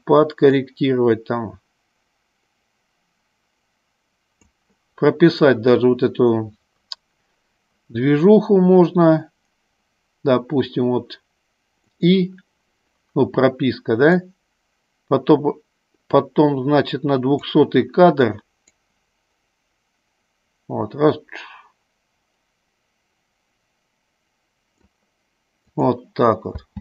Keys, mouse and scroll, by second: 0.7-4.5 drag, 12.1 click, 14.4-17.6 drag, 19.0-25.1 drag, 26.0 click.